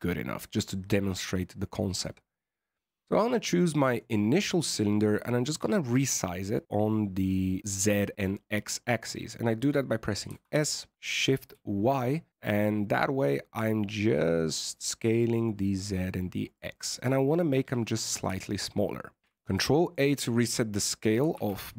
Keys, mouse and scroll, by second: 2.7 click, 3.0-3.3 scroll down 2, 3.3 middle click, 3.9 right click, 4.4 right click, 5.1 middle click, 10.2 s, 16.7 middle click, 19.2 ctrl+a, 20.2 middle click, 20.9 right click, 21.3 ctrl+a.